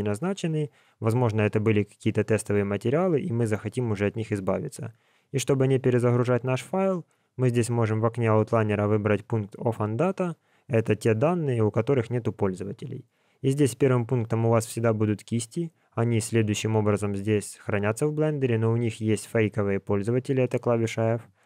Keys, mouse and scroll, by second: 7.5 click, 13.7 click.